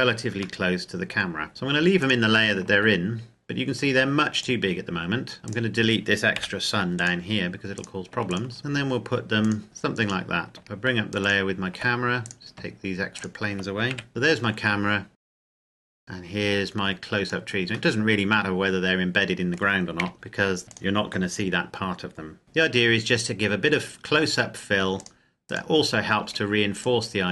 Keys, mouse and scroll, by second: 0.7 middle click, 1.2 scroll down 1, 2.0 shift+click, 3.2-4.5 scroll down 1, 4.5 click, 5.4 scroll down 1, 5.5 right click, 6.4 Delete, 7.0 click, 7.8 right click, 8.3 shift+right click, 8.6 g, 9.5 click, 11.3 shift+click, 12.2 right click, 13.2 shift+right click, 13.9 Delete, 14.1 middle click, 15.2 right click, 15.3 shift+right click, 16.0 click, 18.0 middle click, 20.0 KP_0, 20.6 s, 20.8 click, 22.4 g, 25.3 click, 25.7 right click, 26.6 g, 27.0 click.